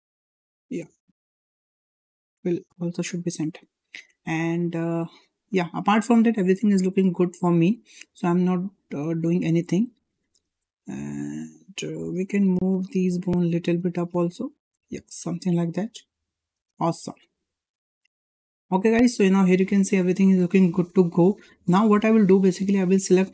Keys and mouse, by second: 0.2 click, 1.6 click, 2.3 click, 3.6 click, 4.0 Tab, 4.6-5.5 middle drag, 6.3 `, 7.7 shift+middle drag, 12.4 Tab, 13.8-16.3 drag, 17.5 click, 18.0 Tab, 18.9 shift+middle drag, 19.7-20.6 shift+middle drag, 21.2 shift+middle drag, 23.0 click.